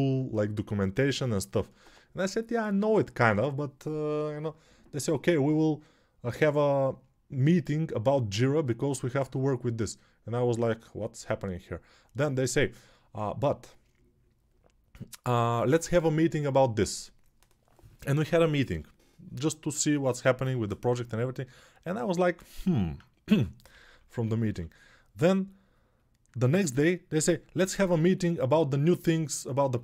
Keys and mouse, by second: 21.6 click, 22.7-29.8 drag, 23.1 g, 23.6 1, 23.8 1.